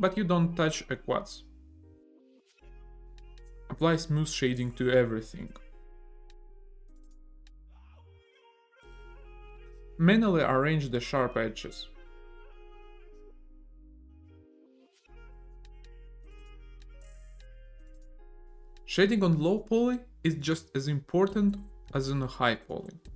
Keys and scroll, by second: 4.0 a, 4.5 w, 7.3 e, 10.4 e, 12.5 ctrl+e, 14.7 f, 15.8 e, 17.4 ctrl+e, 17.8 Tab, 18.4 a.